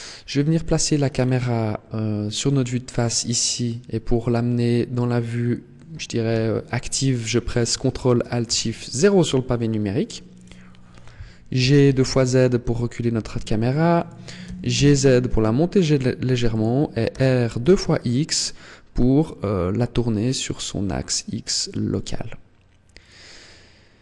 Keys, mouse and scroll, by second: 0.1-1.2 scroll down 9, 1.2-2.6 scroll up 8, 4.6 middle click, 6.1 KP_1, 8.2 ctrl+alt+KP_0, 10.2 right click, 11.4 g, 13.8 click, 14.2 g, 16.4 click, 16.8 r, 22.8 click.